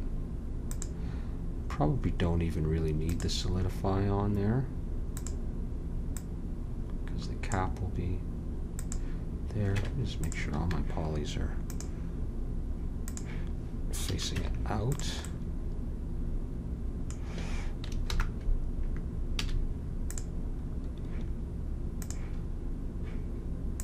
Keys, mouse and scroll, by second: 5.1-8.0 drag, 8.7-10.3 drag, 10.3 Tab, 10.6 a, 13.2 click, 14.0 a, 14.3 Tab, 18.1 alt+h, 19.3 a, 20.0-23.8 drag.